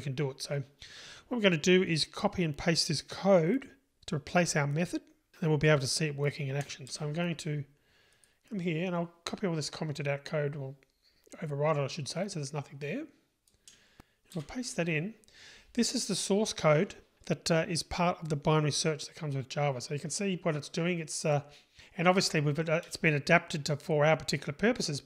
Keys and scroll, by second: 14.4 super+v.